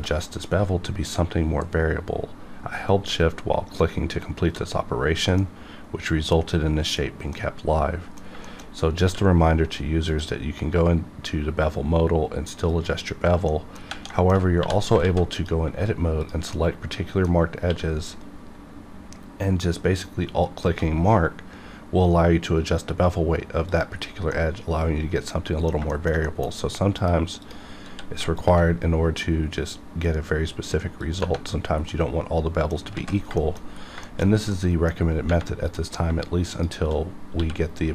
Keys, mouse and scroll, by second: 0.2 middle click, 1.0-2.5 scroll up 1, 5.4-7.3 middle drag, 7.3 middle click, 8.4 shift+middle click, 8.6 shift+middle click, 8.6 scroll up 1, 9.0 q, 10.1 click, 12.7 click, 13.5 middle click, 14.1 shift+middle click, 14.6 2, 15.0 alt+z, 15.3 click, 16.2 shift+click, 16.5 middle click, 17.3-17.6 scroll up 1, 18.5 q, 20.1 alt+Num_Lock, 20.4 alt+click, 23.7 click, 24.0 scroll down 1, 24.3-25.9 middle drag, 25.9 shift+middle click, 26.5 scroll up 1, 26.9 click, 27.9 q, 28.3 alt+click, 31.6 scroll down 1, 31.9 middle click, 32.9 z, 33.3 shift+middle click, 33.5-33.9 shift+scroll down 2, 34.0 shift+middle click, 34.5 middle click, 35.6 click, 36.5 shift+click, 37.3 q.